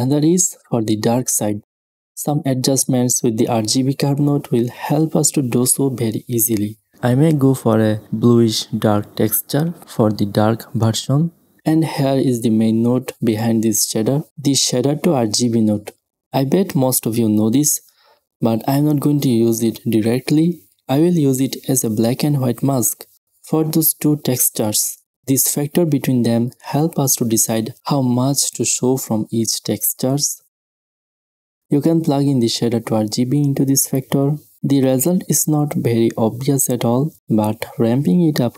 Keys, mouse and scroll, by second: 0.3 n, 1.6-6.1 drag, 9.0 click, 10.1 click, 10.6 x, 10.7 click, 11.2-13.2 drag, 11.2 shift+a, 13.7-15.4 drag, 15.4 shift+a, 19.8-21.2 drag, 22.5-23.0 drag, 26.0 click, 26.6-29.7 middle drag, 30.9-33.0 drag, 33.4-34.0 middle drag, 34.0-35.9 drag, 36.0-37.7 middle drag.